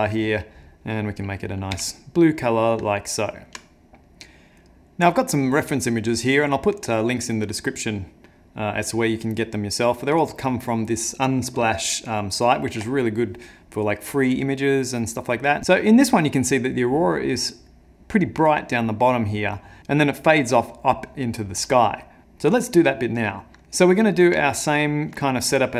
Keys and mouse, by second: 1.7 n, 2.4 middle click, 2.9 ctrl+middle click, 3.7 middle click, 22.2 click, 23.5 ctrl+middle click, 24.5 ctrl+middle click.